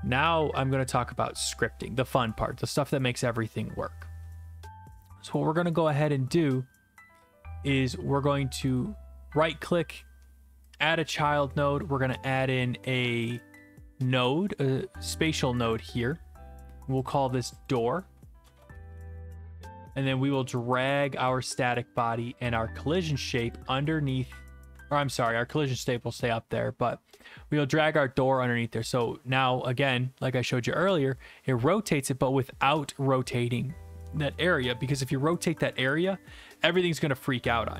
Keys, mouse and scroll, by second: 8.8 right click, 10.8 click, 13.9-15.0 scroll, 15.0-15.7 scroll, 15.7 click, 15.9 click, 17.1 click, 17.7 click, 18.3-19.4 typing, 21.3 click, 23.5 click, 24.8 ctrl+z, 27.2 click.